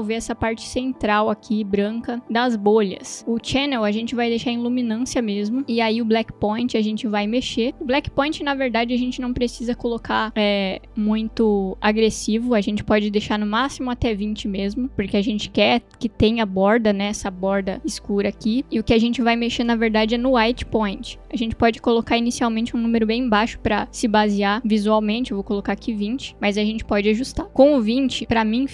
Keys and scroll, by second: 13.2 0, 13.6 Return, 25.6 0, 25.9 Return.